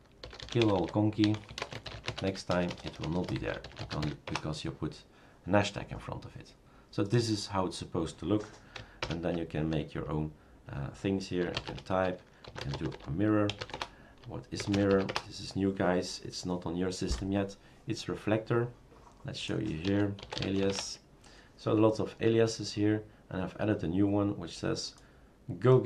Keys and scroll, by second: 0.1-4.5 typing, 9.0 super+Return, 11.4-16.5 typing, 19.6-21.1 typing.